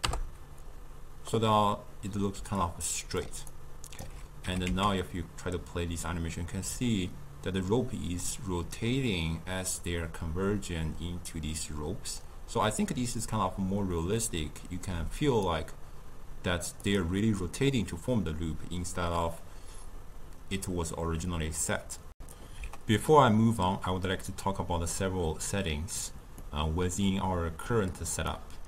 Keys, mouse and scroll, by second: 2.4-4.5 typing, 2.6 click, 3.6 right click, 22.2 shift+q, 26.4-28.3 middle drag, 28.3 click.